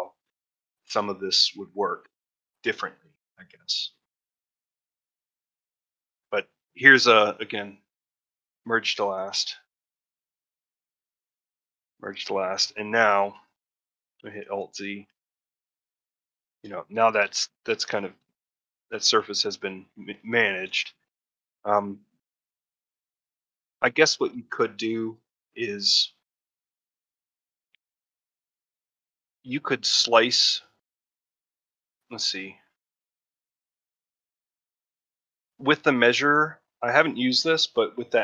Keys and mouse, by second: 10.5 m, 12.2 middle click, 12.6 a, 14.3 alt+z, 14.8 middle click, 15.1 a, 15.2 a, 15.5 shift+middle click, 15.8 middle click, 16.6 shift+middle click, 17.4 middle click, 17.9 middle click, 18.2 ctrl+middle click, 18.6 shift+middle click, 18.8 alt+middle click, 19.4 shift+middle click, 20.1 ctrl+middle click, 21.1 middle click, 21.7 ctrl+middle click, 27.1 shift+middle click.